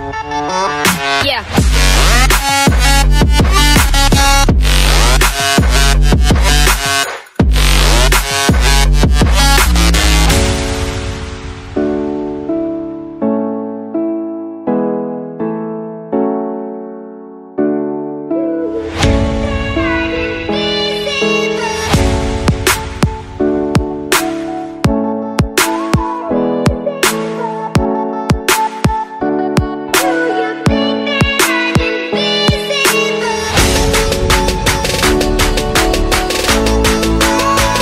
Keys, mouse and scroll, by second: 0.5 click, 1.0 middle click, 2.1 click, 4.8 shift+click, 6.1 click, 7.9 click, 8.3-9.2 typing, 10.6 click, 11.2 typing, 11.3 Return, 15.5 click, 15.8 middle click, 16.5 click, 17.3 click, 19.3 click, 20.0 click, 20.3 click, 22.5 click, 23.4 click, 23.6 z, 24.3 middle click, 25.6 click, 26.4 click, 26.6 middle click, 27.7 click, 28.3 click, 28.6 middle click, 29.6 click, 30.9 z, 33.9 click, 34.7 click, 35.4 click, 36.1 click, 36.4 click, 36.9 click, 37.3 click.